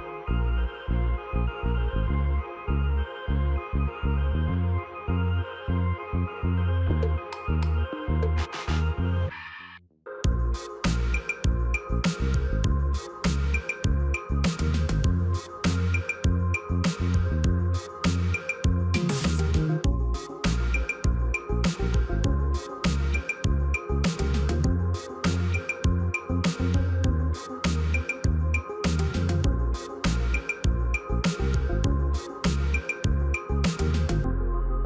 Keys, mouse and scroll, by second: 5.2 shift+click, 7.7 ctrl+g, 10.3 ctrl+j, 13.6 right click, 20.3 double click, 27.9 double click, 28.8 c, 30.2 n, 31.2-33.6 typing.